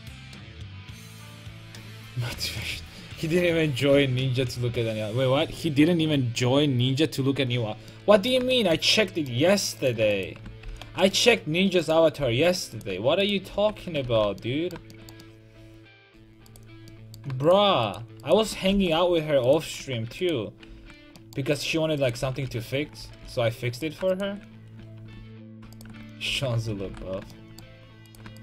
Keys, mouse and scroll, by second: 1.4 a, 3.8 KP_5, 7.9 middle click, 9.8-11.2 right drag, 10.7 alt+m, 11.3-12.7 right drag, 12.2 ctrl+x, 13.6 ctrl+x, 13.8 a, 14.1 ctrl+t, 15.1 middle click, 18.7 alt+m, 20.7 ctrl+x, 22.2 ctrl+x, 22.5 a, 23.0 ctrl+z, 23.2 ctrl+z, 25.2 ctrl+z, 26.3 ctrl+x, 26.6 a, 26.9 ctrl+t, 27.0 a.